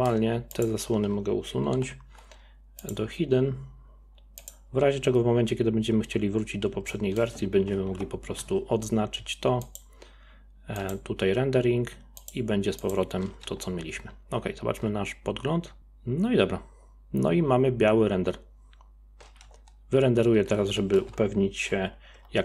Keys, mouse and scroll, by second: 0.5 click, 1.7 m, 4.4 click, 6.9-7.9 middle drag, 7.9 KP_0, 9.7 click, 10.8 click, 12.2 click, 12.8 click, 13.5 z, 19.5 z, 21.2 ctrl+s.